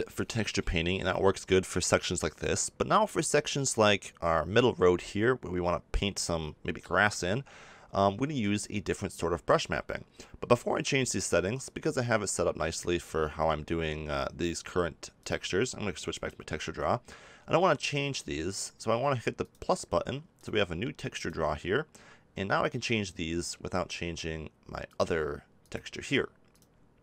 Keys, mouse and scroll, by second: 12.7 click.